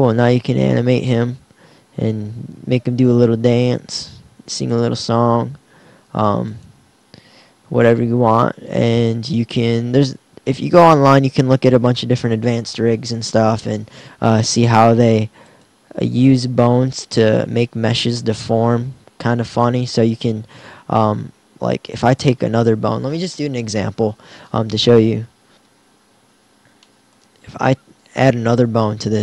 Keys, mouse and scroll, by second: 15.5-17.0 middle drag.